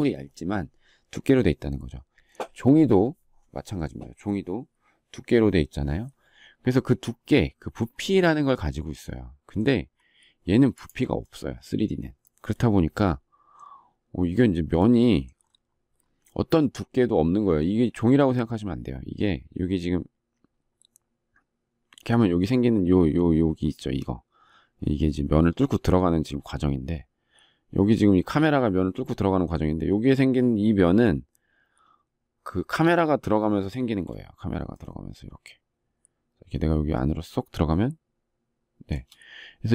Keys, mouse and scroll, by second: 34.6 shift+middle click.